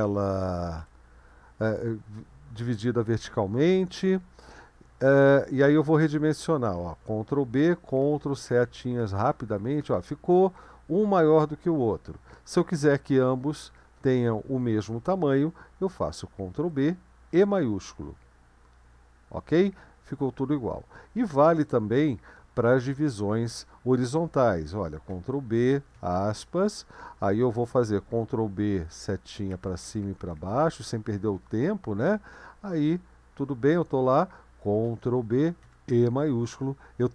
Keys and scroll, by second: 0.8 shift+5, 7.3 ctrl+b, 7.9 ctrl+Left, 8.1 ctrl+Left, 8.2 ctrl+Left, 8.4 ctrl+Left, 8.5 ctrl+Right, 8.7 ctrl+Right, 8.9 ctrl+Right, 9.0 ctrl+Left, 9.2 ctrl+Left, 9.4 ctrl+Left, 9.5 ctrl+Left, 9.7 ctrl+Left, 16.5 ctrl+b, 17.2 shift+e, 25.1 ctrl+b, 26.0 shift+', 28.2 ctrl+b, 28.6 ctrl+Up, 28.8 ctrl+Up, 28.9 ctrl+Up, 29.1 ctrl+Up, 29.5 ctrl+Down, 29.7 ctrl+Down, 29.9 ctrl+Down, 30.1 ctrl+Down, 30.2 ctrl+Down, 30.6 ctrl+Up, 30.8 ctrl+Up, 31.0 ctrl+Up, 31.2 ctrl+Up, 31.4 ctrl+Up, 34.9 ctrl+b, 35.6 shift+e.